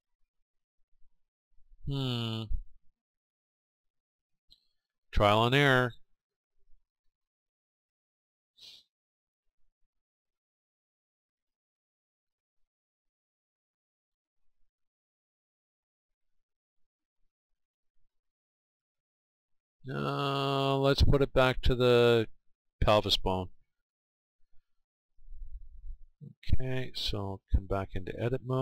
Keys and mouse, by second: 0.3-2.2 right drag, 4.3-12.4 middle drag, 12.4-14.4 right drag, 15.6-18.4 right drag, 21.6-24.6 right drag, 25.5-27.5 right drag, 27.3-28.6 drag.